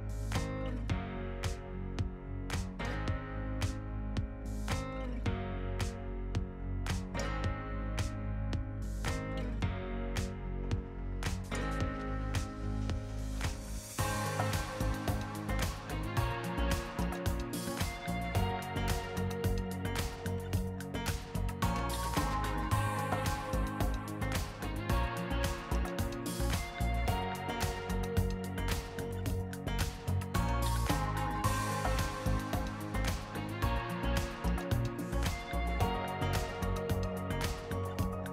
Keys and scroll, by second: 0.4 r, 1.2 space, 1.6 r, 2.0 Return, 7.0 t, 7.3 ctrl+s, 8.4 s, 9.3 ctrl+shift+n, 10.3 n, 17.2-20.3 typing, 21.8 ctrl+s, 26.8 ctrl+s, 27.8 s, 32.3-35.4 scroll.